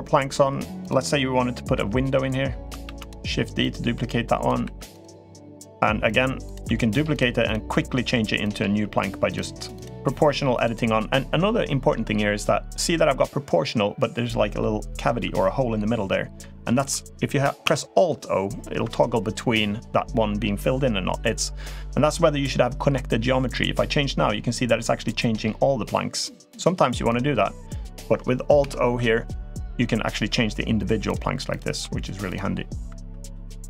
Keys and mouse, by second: 0.6 click, 1.5 l, 2.6 shift+d, 3.4 click, 4.5 2, 4.7 click, 5.1 g, 6.2 click, 6.4 g, 7.2 click, 7.5 g, 8.6 g, 9.5 click, 9.8 g, 17.6 alt+o, 23.3 click, 23.5 g, 28.5 alt+o, 29.6 g, 31.3 click, 31.6 g, 32.9 3, 33.0 click, 33.5 click.